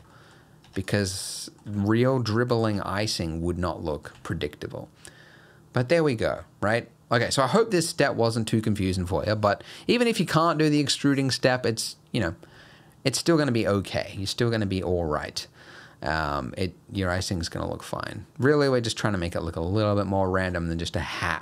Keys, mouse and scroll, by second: 0.1 middle click, 0.4 scroll down 2, 0.7 Tab, 0.9 click, 1.3 middle click, 1.7 g, 2.7 Tab, 3.3 middle click, 4.2 alt+a, 4.4 middle click, 9.0 middle click, 9.6-10.4 scroll up 1, 10.4 click, 12.6 middle click, 15.4 middle click, 17.2 middle click.